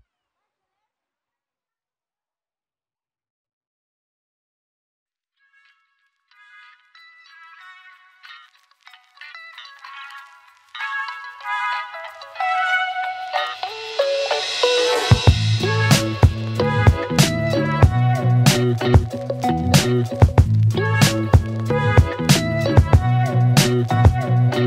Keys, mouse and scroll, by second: 0.9 click, 3.1 click, 8.5-9.3 click, 10.7 shift+click, 14.5 p, 16.3-17.3 click.